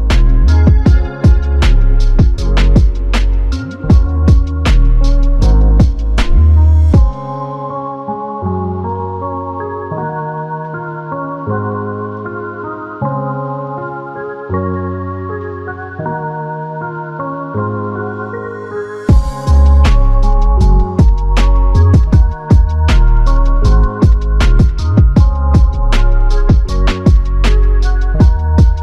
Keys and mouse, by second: 0.8 alt+click, 3.7 double click, 8.7 double click, 13.4 double click, 18.3 double click, 24.7 double click.